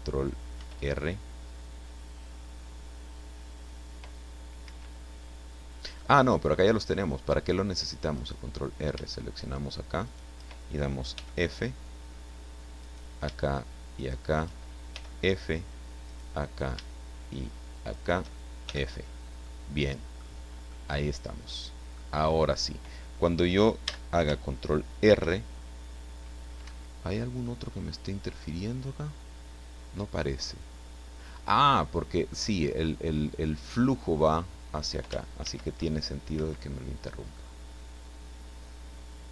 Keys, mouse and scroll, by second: 0.6 ctrl+r, 4.7 Escape, 6.0 middle click, 8.1 right click, 10.1 shift+right click, 11.1 f, 12.8 right click, 13.9 shift+right click, 14.9 f, 16.0 right click, 17.9 shift+right click, 18.7 shift+f, 19.1 scroll down 1, 19.5 middle click, 20.4 scroll down 1, 20.7-21.9 middle drag, 23.9 a, 25.1 ctrl+r, 26.7 Escape, 27.5-32.5 middle drag, 35.4 ctrl+r, 36.3 Escape, 37.4-39.3 middle drag.